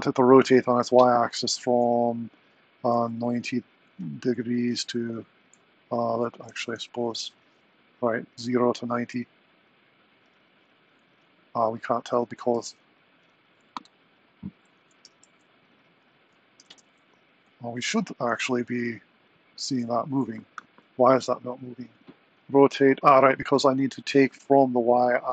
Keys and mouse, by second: 0.3-7.7 drag, 8.6 click, 9.1 r, 11.1 r, 14.6 click, 16.5 r, 19.9 super+Down, 24.1-25.3 drag.